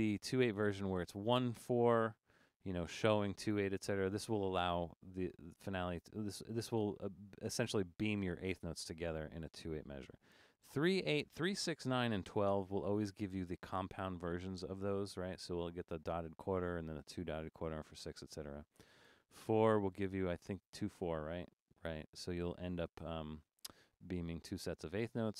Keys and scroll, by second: 10.1 e, 10.5 e, 12.4 typing, 19.1 r.